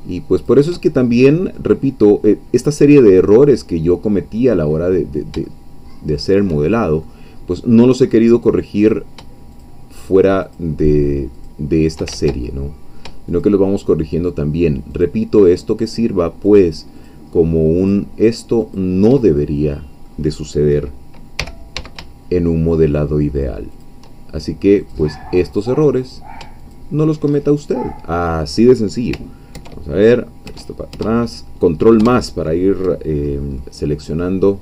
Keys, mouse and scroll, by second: 0.4 shift+click, 1.2 scroll down 2, 1.6-3.9 middle drag, 3.9 scroll down 2, 4.4-5.6 middle drag, 5.9 shift+middle click, 6.8 shift+scroll down 2, 7.0-8.8 middle drag, 8.8 click, 9.6-10.7 shift+drag, 11.5 shift+click, 12.1 ctrl+shift+z, 12.4 ctrl+shift+middle click, 13.3 shift+click, 15.0-16.7 shift+drag, 17.0 shift+click, 17.9-18.9 shift+drag, 19.2-21.4 shift+middle drag, 21.4 g, 21.8 x, 23.8 shift+click, 24.9 click, 26.1 click, 26.6 shift+click, 27.4-29.1 shift+middle drag, 33.3 ctrl+scroll down 3, 33.6-34.6 middle drag.